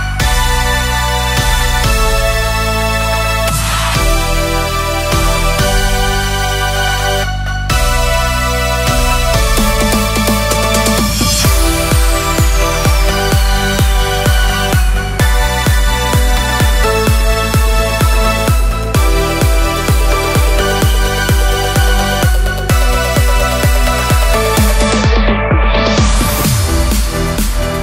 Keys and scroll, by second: 9.0 super+z, 18.3 Escape, 24.9 super+c, 25.9 super+v.